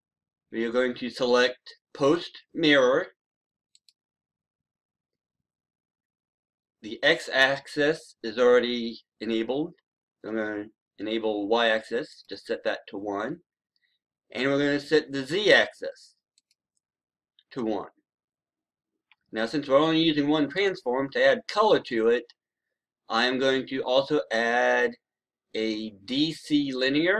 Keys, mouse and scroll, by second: 0.3 scroll down 1, 0.7-3.6 scroll up 1, 3.6-27.1 drag.